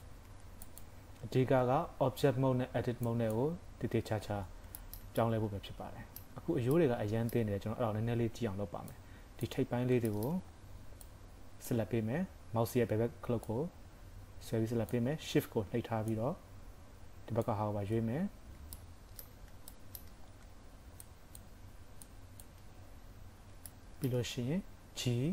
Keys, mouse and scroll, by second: 0.2 Tab, 0.7 click, 1.5 shift+s, 4.5 scroll down 2, 4.8 shift+middle click, 5.2 middle click, 6.8 middle click, 8.9 click, 9.7 scroll up 4, 10.1 shift+middle click, 10.4-10.8 scroll up 2, 13.5 click, 16.4 shift+click, 18.2-18.8 scroll down 4, 18.8 shift+middle click, 19.8 shift+middle click, 20.2 scroll up 4, 21.0 shift+click, 22.8-23.3 scroll down 6, 23.2 KP_3, 23.7 shift+middle click, 24.8 g.